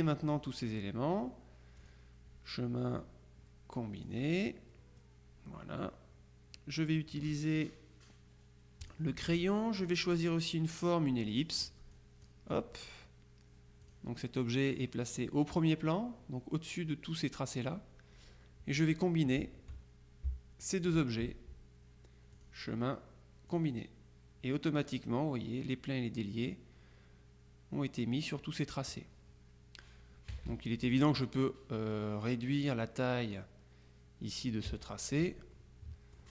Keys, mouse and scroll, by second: 1.9 click, 4.1 click, 4.8 click, 8.9 click, 9.9-11.8 drag, 12.0 click, 13.9 click, 17.6 click, 20.7 shift+click, 22.4 click, 23.6 click, 30.4 KP_Subtract, 34.7 KP_Subtract, 35.6-36.3 drag.